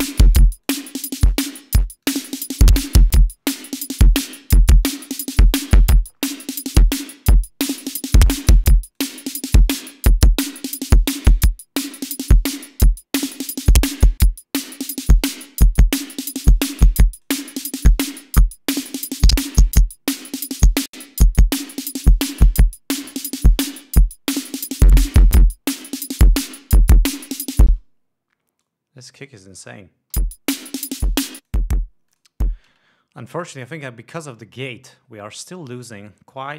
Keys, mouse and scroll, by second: 1.1-2.0 drag, 2.5-3.2 drag, 4.1 click, 5.2-6.2 drag, 6.2 scroll down 2, 6.6 scroll up 2, 6.9-9.7 drag, 10.3-11.4 drag, 11.8 scroll down 2, 12.3-14.5 drag, 15.2-15.8 drag, 16.5-17.9 drag, 18.3-21.4 drag, 21.7 scroll down 2, 21.9-22.6 drag, 24.6-24.9 scroll up 2, 25.0-26.1 drag, 26.2 scroll down 2, 27.3-28.4 drag, 28.4 space, 29.1 click, 30.6 l, 31.8 click, 32.5 click, 33.2 space.